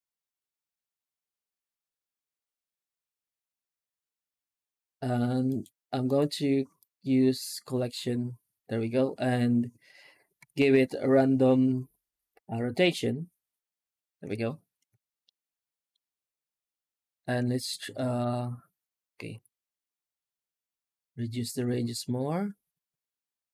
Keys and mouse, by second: 10.2 F9, 15.2 shift+middle drag, 15.4 shift+middle click, 15.7 shift+middle click, 17.5 shift+middle drag, 17.8 shift+middle drag, 19.2 F9.